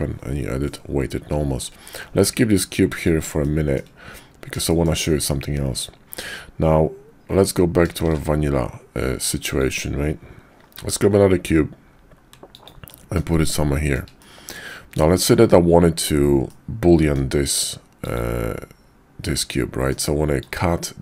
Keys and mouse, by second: 2.2 g, 3.4-3.8 shift+drag, 4.7 shift+drag, 8.0 shift+a, 10.7 g, 12.9-13.2 drag, 13.7 shift+click, 14.2-14.6 middle drag, 16.5-17.2 middle drag, 19.3-19.9 middle drag.